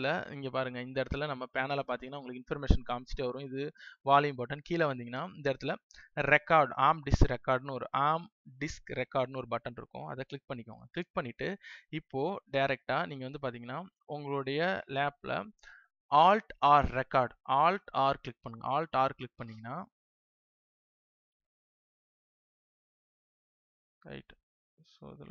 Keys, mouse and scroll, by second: 2.2 space, 9.9 click, 18.3 alt+r, 21.6 click.